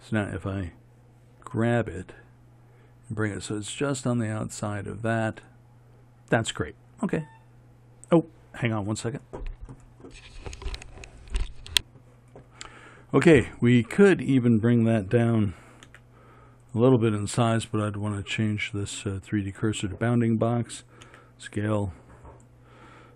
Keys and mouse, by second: 1.6 g, 16.1 s, 19.5-21.2 drag, 21.2 s.